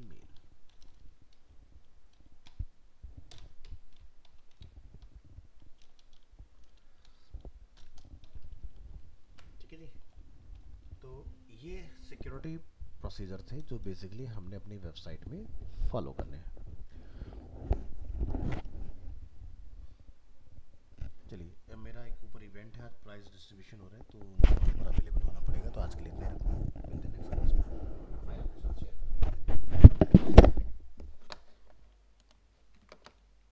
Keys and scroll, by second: 8.9 ctrl+s, 32.4 ctrl+s, 32.7 ctrl+w.